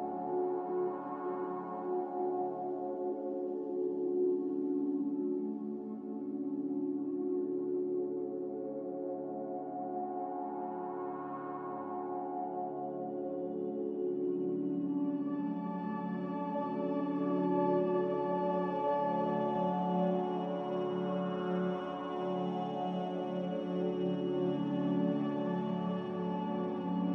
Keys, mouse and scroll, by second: 3.1-4.0 typing, 4.1 Return, 5.1 click, 8.8 click, 18.2-19.1 typing, 21.3 typing, 21.6 Return.